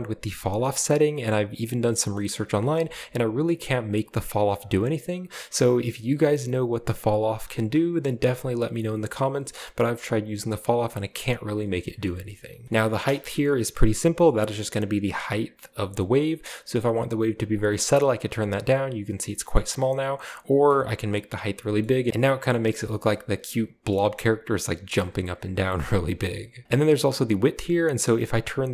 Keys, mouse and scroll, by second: 0.5 click, 2.1-2.5 shift+middle drag, 2.5-3.8 shift+scroll up 1, 2.7-3.8 shift+middle drag, 3.8 click, 5.1-7.9 drag, 8.9-10.6 middle drag, 9.5 space, 10.3-11.8 drag, 12.3 space, 12.6-13.2 scroll down 1, 12.9 space, 13.7-17.5 drag, 18.4-19.2 scroll up 2, 19.2 scroll down 1, 19.3 middle click, 19.3 scroll up 1, 20.3 click, 21.3-22.2 scroll down 2, 22.2-22.5 scroll up 2, 22.5-23.1 scroll down 2, 23.9 middle click, 24.1-24.6 scroll up 1, 24.6-25.6 scroll down 1, 25.0-25.5 middle drag, 25.8-28.7 drag.